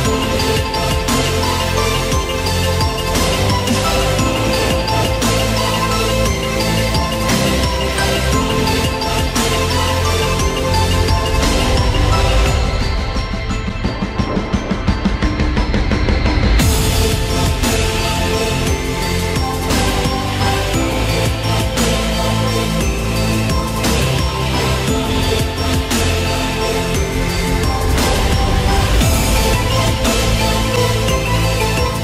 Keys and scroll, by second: 14.6 ctrl+t.